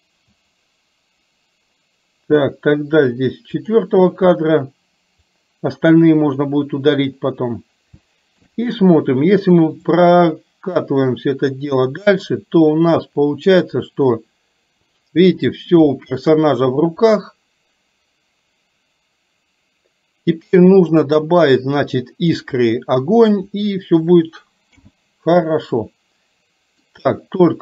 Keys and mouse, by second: 5.4 click, 6.4 middle click, 8.1 shift+middle click, 9.9-15.3 drag, 15.9 shift+middle click, 17.2-22.4 drag, 24.8 n, 25.8-26.9 middle drag.